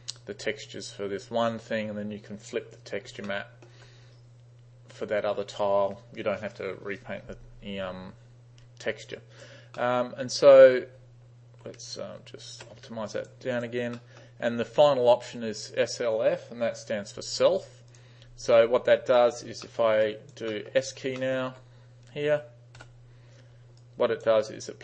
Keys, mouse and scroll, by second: 3.3 alt+middle click, 9.2 alt+right click, 9.8-10.2 alt+middle drag, 12.2 alt+f, 13.2 alt+right click, 13.6 alt+right click, 14.0 alt+middle drag, 19.2 alt+right click, 19.7 alt+middle drag, 20.1 alt+right click, 20.5 alt+middle click, 21.2 alt+middle drag, 22.8 s, 23.8 alt+right click, 24.5 alt+right click.